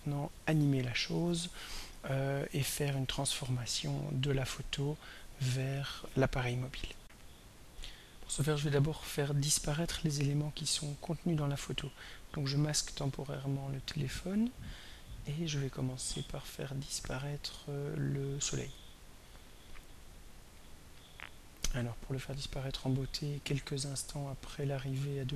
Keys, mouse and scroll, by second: 7.0 r, 12.0 click, 17.6 click, 18.4 click, 19.6 click, 20.5 click, 22.6 click, 24.7-25.3 drag.